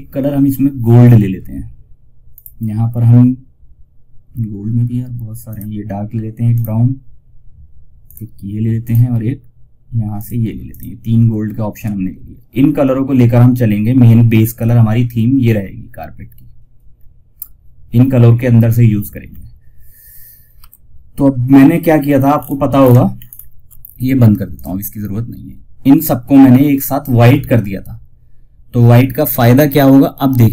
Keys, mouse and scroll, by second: 1.6 click, 1.6 typing, 4.7 click, 16.2-18.0 scroll down 1, 18.6 scroll down 1, 19.9 F4, 21.6-21.9 ctrl+scroll up 1, 22.7 ctrl+scroll up 1, 23.8 click, 30.2-30.5 scroll up 1.